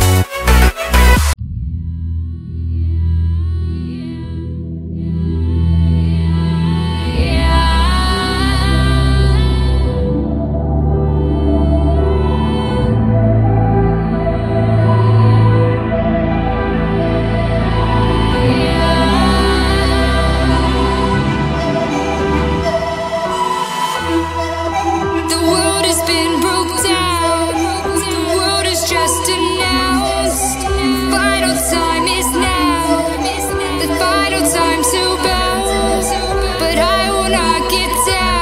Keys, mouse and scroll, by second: 0.0-1.5 typing, 3.6-5.1 typing, 6.3 click, 7.9 F10, 8.5 click, 8.7 F2, 9.3 Right, 9.6 BackSpace, 11.1 typing, 12.0 Return, 13.1 alt+click, 14.3 click, 16.7 ctrl+c, 16.9 click, 17.1 v, 17.6 click, 20.7 right click, 21.8 click, 24.3-25.6 typing, 26.5-33.1 drag, 34.6 Return, 35.7 ctrl+click, 36.5-38.1 drag, 38.2 right click.